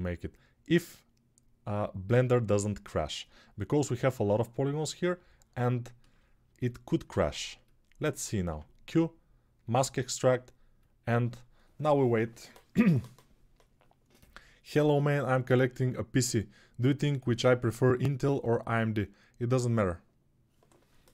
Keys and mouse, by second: 8.2 q.